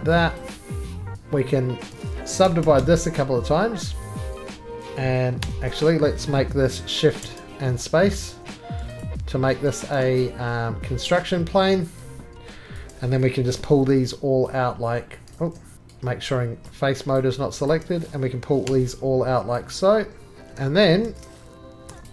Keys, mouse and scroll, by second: 0.9 click, 0.9 scroll down 5, 0.9-2.2 scroll, 2.4-2.8 typing, 4.7 shift+click, 5.4 3, 5.8 click, 7.0 1, 10.0 click, 10.0 middle click, 11.0 shift+click, 12.5 shift+click, 12.7 click, 13.5 g, 15.3 ctrl+click, 15.4 ctrl+z, 15.7 ctrl+click, 16.6 ctrl+click, 17.0 shift+click, 17.7 click, 18.7 g, 20.4 click, 20.4 right click, 20.4-20.8 scroll down 2, 21.0-21.9 shift+scroll down 1, 21.9 shift+middle click, 21.9 3.